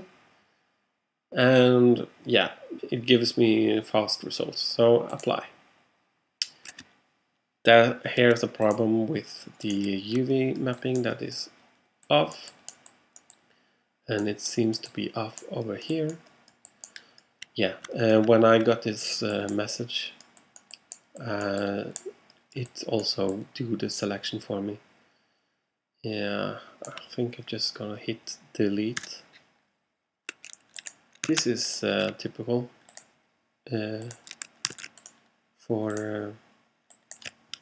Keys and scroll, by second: 29.0 BackSpace, 31.4 super+a, 34.8 super+z.